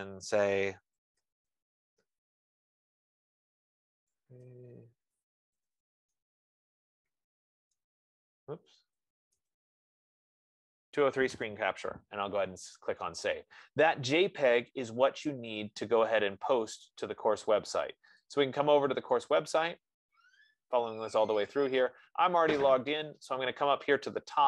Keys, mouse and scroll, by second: 0.9 ctrl+a, 1.2-9.2 typing, 15.9 Return, 18.6 click, 20.2 click, 21.8-22.8 scroll.